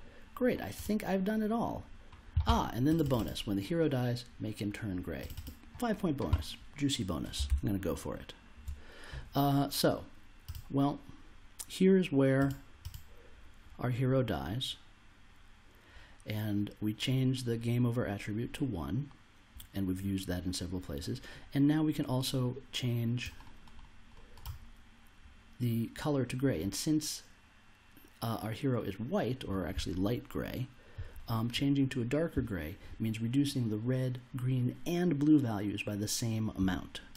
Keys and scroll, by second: 7.4 super+Tab.